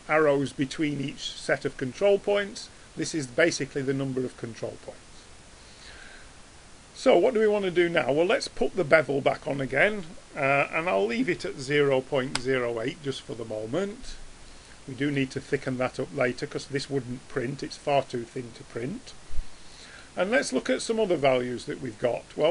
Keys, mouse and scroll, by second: 15.7-16.1 middle drag.